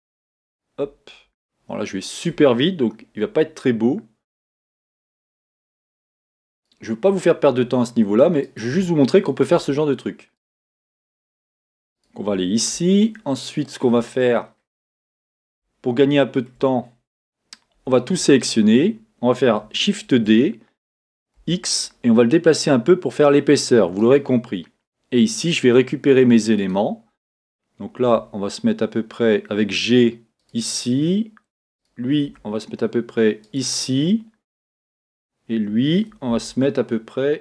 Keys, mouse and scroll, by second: 1.4-4.6 shift+middle drag, 2.3-3.2 scroll up 2, 3.2 e, 13.5-24.5 shift+middle drag, 14.4 scroll down 1, 15.7 scroll up 1, 17.7 a, 20.0 shift+d, 24.5-26.7 scroll up 2, 24.6-26.7 middle drag, 26.7-28.3 scroll up 1, 28.3 click, 28.7 g, 31.8 click, 32.3 g, 34.9 click, 36.5 g.